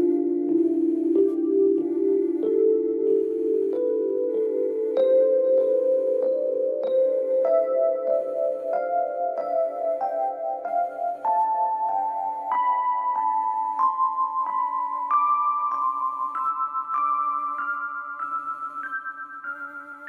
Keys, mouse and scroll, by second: 0.2-1.2 scroll up 2, 1.2-1.8 scroll up 3, 2.0 g, 4.5-5.1 scroll down 2, 5.1-5.6 scroll down 1, 5.6 shift+middle click, 6.1-7.1 scroll up 5, 7.8 click, 8.7 g, 12.3 scroll down 1, 12.8-14.8 shift+middle drag, 14.8 click, 16.1 g, 19.4 click.